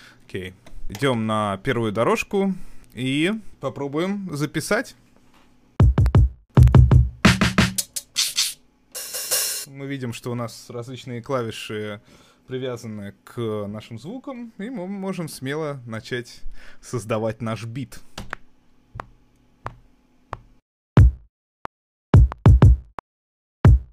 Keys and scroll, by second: 18.2 r.